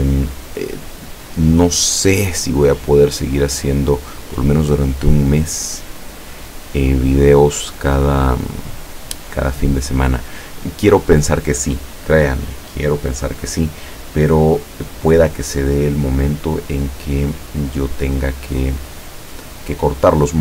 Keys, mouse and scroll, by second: 0.3 click, 1.3 click, 3.1 click, 4.9 click, 5.6 click, 9.6 click, 15.6 middle click, 17.2-18.4 middle drag.